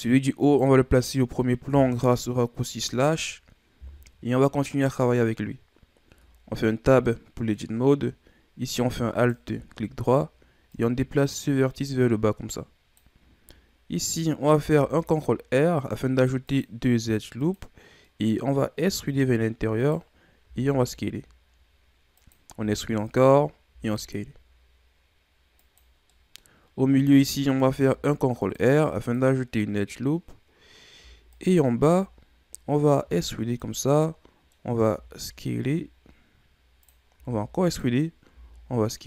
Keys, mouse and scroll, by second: 0.4-2.6 right drag, 2.6 KP_Divide, 4.3-4.9 scroll down 3, 4.9-6.0 scroll up 2, 6.0 Tab, 7.0-9.1 middle drag, 9.1-10.7 alt+right drag, 10.7-13.7 drag, 14.5 ctrl+r, 18.0 middle click, 18.8 e, 20.4 s, 22.5 e, 23.6 s, 26.1 middle click, 26.5-27.6 scroll up 1, 27.6 ctrl+r, 31.3-33.0 alt+right drag, 33.0 e, 33.9 middle click, 34.9 s, 37.1 e, 38.3 s.